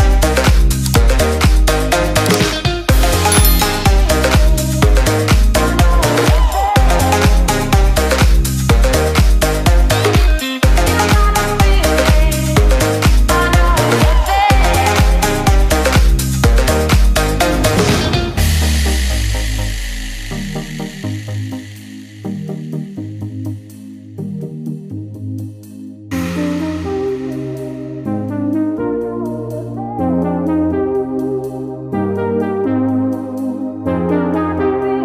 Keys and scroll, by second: 27.8 ctrl+d, 28.3 ctrl+space.